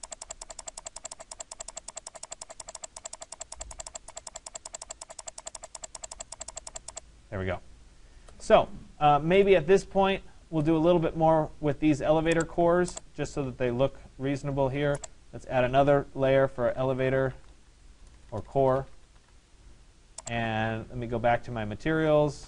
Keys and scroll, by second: 9.0 Escape, 17.6 BackSpace.